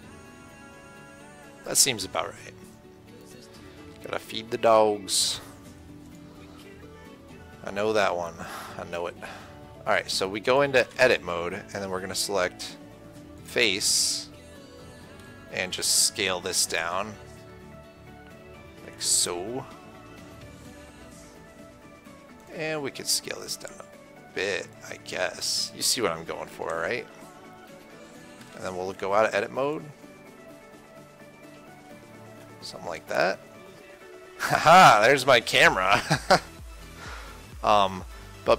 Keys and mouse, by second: 0.7 KP_1, 3.4 KP_3, 6.3-8.6 drag, 10.6 click, 11.3 Tab, 13.7-18.8 drag, 15.9 s, 22.8-25.1 drag, 23.1 s, 27.0 KP_7, 28.9 Tab, 37.0 KP_1, 37.7 KP_3.